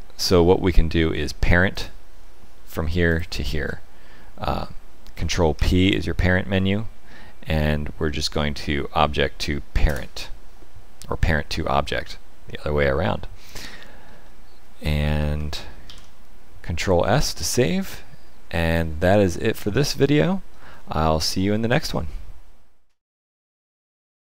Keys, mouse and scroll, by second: 1.7 click, 3.0 shift+click, 5.5 ctrl+p, 12.0 middle click, 13.9-15.3 scroll down 4, 15.8 ctrl+s, 18.8 middle click.